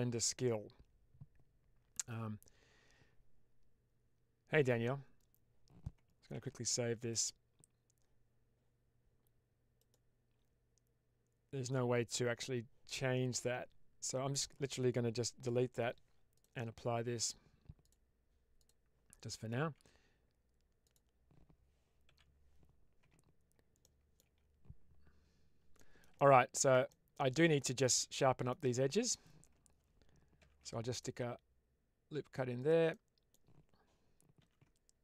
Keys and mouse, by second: 6.2 ctrl+s, 9.7-11.5 drag, 15.4 Delete, 17.8-18.6 drag, 19.2 middle click, 19.5 Tab, 22.9 Tab, 23.7 middle click, 24.1 Tab, 25.8 middle click, 26.0 middle click, 26.8 middle click, 27.3-28.4 middle drag, 30.3 ctrl+r, 32.8 middle click, 33.0 click, 34.3 ctrl+r.